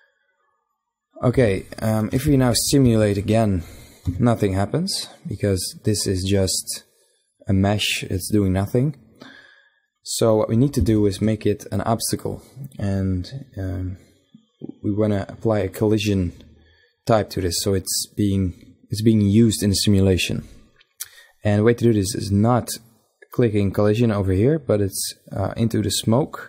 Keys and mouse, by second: 1.3 shift+Left, 1.8 alt+a, 3.7 z, 10.4 alt+a, 25.3-26.4 drag.